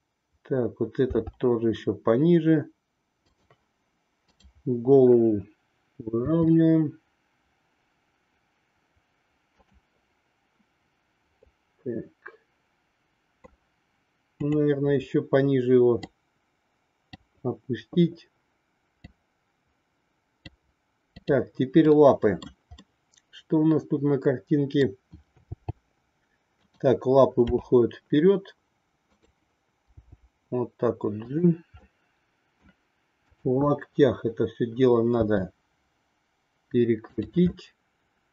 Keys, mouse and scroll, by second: 1.1 r, 6.3 r, 11.3-13.4 middle drag, 14.3-15.9 drag, 16.1-17.3 drag, 18.9-20.6 drag, 21.2-22.7 drag, 22.8-24.8 middle drag, 25.5 g, 27.5 r, 29.9 g, 32.1 middle click, 33.2-34.7 drag, 35.2 r, 37.6-38.3 middle drag.